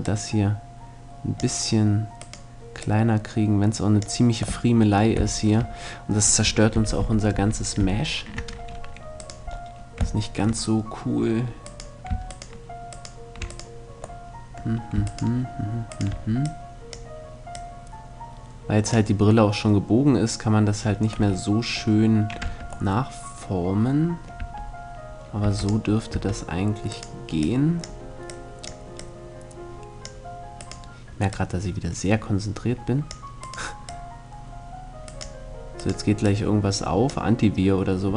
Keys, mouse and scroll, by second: 1.8-4.2 right drag, 2.4-4.2 drag, 4.2 middle click, 6.4 ctrl+z, 6.6 ctrl+z, 6.9 ctrl+z, 7.4 ctrl+z, 8.8-10.6 right drag, 10.6-16.0 middle drag, 11.3-17.3 right drag, 16.0-18.9 drag, 20.4 middle click, 20.8 a, 22.1 Tab, 24.0 Tab, 25.1 Tab, 25.3-28.3 right drag, 25.7 Tab, 27.0-28.3 drag, 29.2-30.3 drag, 30.3-32.1 right drag, 30.9-32.7 drag, 33.0-35.3 right drag, 33.5-35.3 drag, 35.4-37.3 right drag, 35.8-38.0 drag.